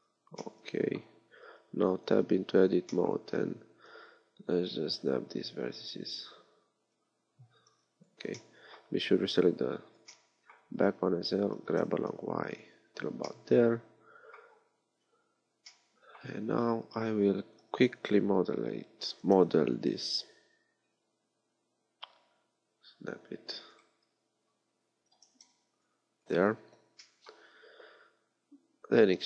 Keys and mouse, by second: 1.4 Tab, 2.2 KP_3, 3.3 a, 3.9 b, 7.1 z, 7.7 b, 11.6 g, 15.0 KP_3, 16.4 a, 17.6 b, 19.2 g, 25.2 g, 27.1-28.4 drag, 28.9 e.